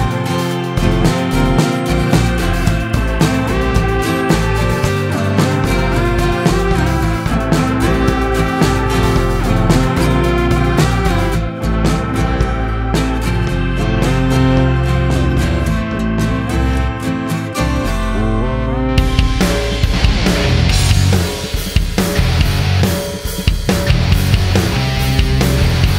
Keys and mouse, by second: 0.0 n, 0.4 space, 3.2 space, 5.5 click, 7.1 click, 10.1 click, 11.8 space, 13.6 space, 18.0-20.8 drag, 21.8 space, 23.4 space.